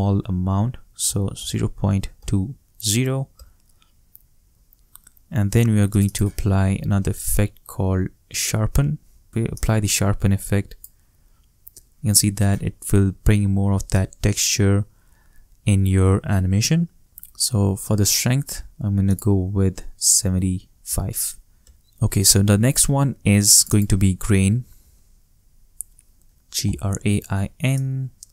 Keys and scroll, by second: 1.0 shift+0, 1.8 shift+2, 2.1 shift+0, 3.3 shift+Return, 6.3-8.3 typing, 20.2 shift+7, 20.8 shift+5, 21.6 shift+Return, 24.1-26.6 typing.